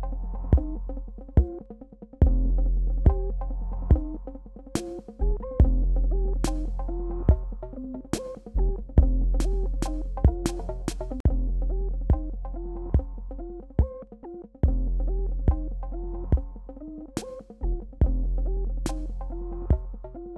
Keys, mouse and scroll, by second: 1.8 shift+Return, 16.2 shift+Num_Lock, 16.2 shift+click, 18.2 ctrl+j.